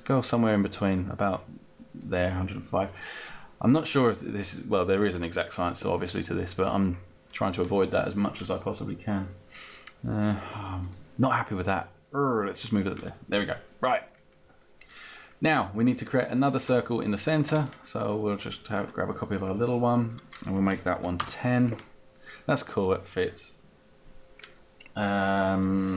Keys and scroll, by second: 20.6 1, 20.9 0, 21.2 Return.